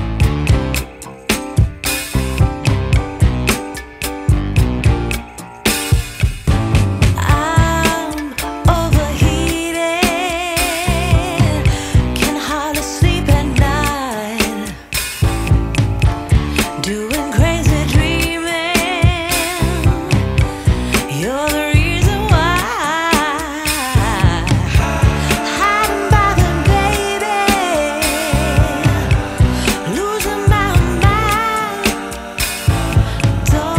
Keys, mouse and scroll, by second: 0.1 click, 1.2 scroll up 1, 1.3 scroll down 1, 1.6-3.0 scroll up 4, 3.0 click, 4.8 click, 6.8 Tab, 8.4 right click, 12.2 click, 13.4 click, 13.9 click, 14.2 click, 14.4 click, 14.7 click, 15.0 click, 15.2 click, 15.5 click, 15.9 click, 18.3 click, 23.6 click, 30.0 click.